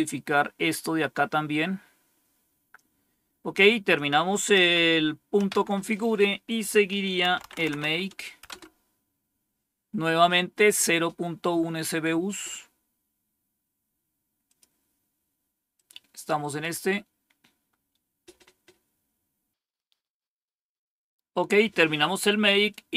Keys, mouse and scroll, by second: 3.8 click, 4.5 Up, 5.3 Down, 7.0-8.2 typing, 8.4 Return, 11.3-12.4 scroll down 1, 14.3 click, 15.6 click, 22.6-22.9 drag.